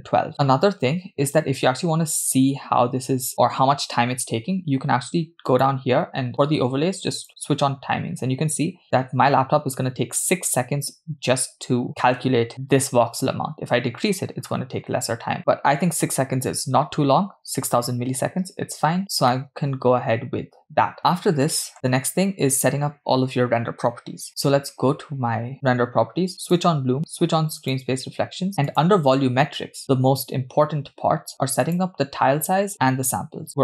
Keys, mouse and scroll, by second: 5.5-8.2 drag, 19.0 scroll down 2, 19.3-21.7 middle drag, 25.5 click, 26.5 click, 27.7 click, 28.7 click, 29.3-30.2 scroll down 4, 31.7-32.6 drag.